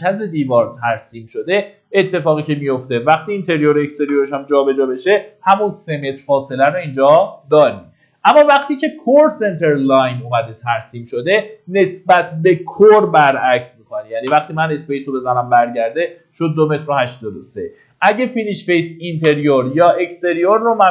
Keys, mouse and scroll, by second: 2.0-2.9 scroll down 1, 3.0 click, 7.0-7.4 scroll down 1, 7.9 middle click, 11.7 click, 17.3 middle click, 18.9 click, 20.4 middle click.